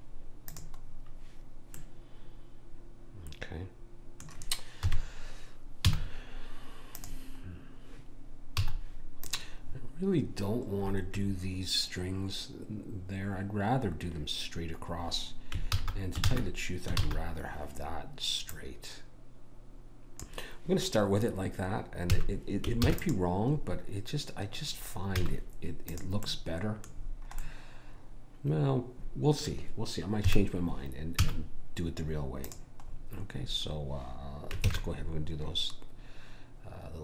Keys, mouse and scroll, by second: 2.2 middle click, 4.8 KP_1, 5.9 z, 8.6 z, 9.9-11.8 middle drag, 15.8 ctrl+z, 16.3 ctrl+z, 17.0 ctrl+z, 18.4 click, 22.1 a, 22.8 ctrl+s, 25.2 z, 26.5-29.2 middle drag, 30.2 KP_1, 31.2 z, 32.9-34.6 middle drag, 34.7 shift+a.